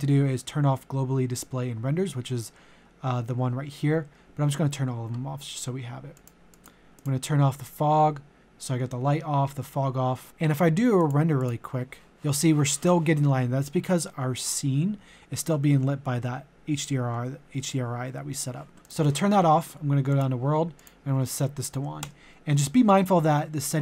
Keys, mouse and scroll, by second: 21.7 KP_0.